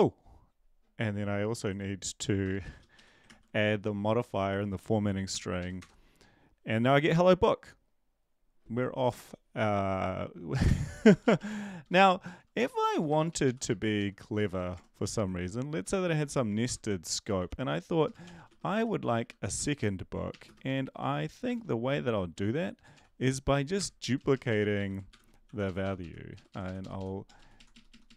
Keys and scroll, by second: 2.5-3.2 typing, 3.2 ctrl+s, 5.3 ctrl+l, 5.6 Up, 5.8 Return, 10.5 Left, 11.2 Down, 11.3 Down, 12.6 End, 12.9 Return, 13.1 Return, 13.3 Up, 13.4 Up, 13.6 Right, 13.9 Down, 14.5 Return, 14.7 Tab, 16.1 typing, 17.4-22.3 typing, 23.7 Return, 24.5 Down, 24.7 End, 25.1 shift+Home, 25.4 ctrl+c, 25.6 Up, 25.8 Up, 26.0-27.2 Up, 27.2 Down, 27.4 Right, 27.5 Right, 27.7 Right.